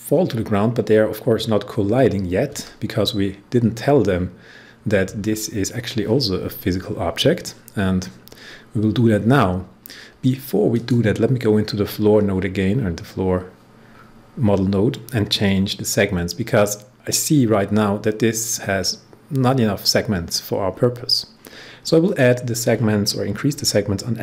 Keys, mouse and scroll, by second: 10.6 click, 12.0 scroll down 1, 13.9 scroll down 1, 22.0 click, 24.1-24.2 typing.